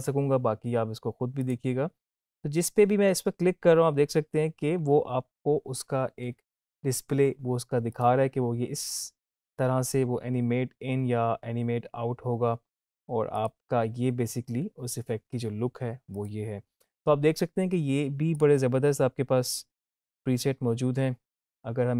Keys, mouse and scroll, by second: 1.4 click, 7.9 click, 13.3 click.